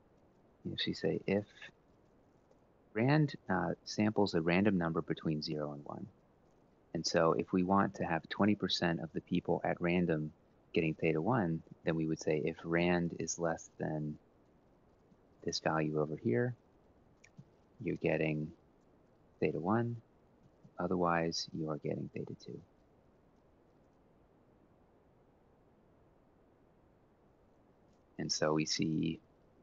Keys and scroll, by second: 0.4-2.6 typing, 12.5 typing, 16.2 F4, 17.1 ,, 20.1 F4, 23.1 F4, 24.2 Return, 25.0 Left, 25.2 ctrl+Down, 25.4 Right, 25.6 1, 25.8 Up, 26.2 ctrl+c, 26.4 ctrl+shift+Down, 26.6 ctrl+v.